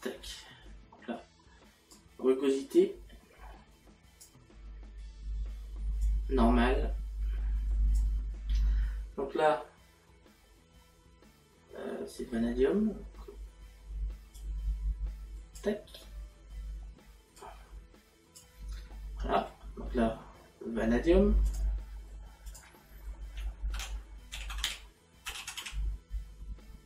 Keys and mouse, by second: 6.1 click, 14.4 click, 17.4 click, 19.0 middle click, 21.5 click, 24.4 a.